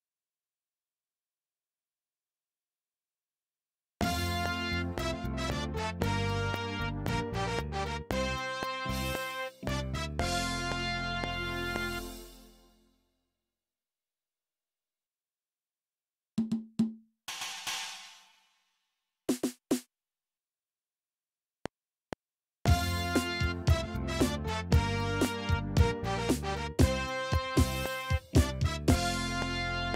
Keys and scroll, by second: 3.9 space, 5.6 ctrl+Left, 11.9 space, 21.5 F7.